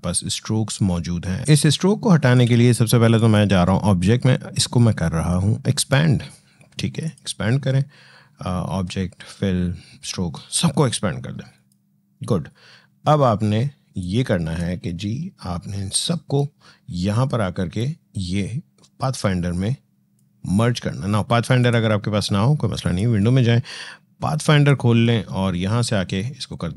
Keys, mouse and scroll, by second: 1.4 space, 1.5 click, 1.8 space, 7.4 click, 12.9 click, 13.8-16.8 drag, 19.0-21.4 drag.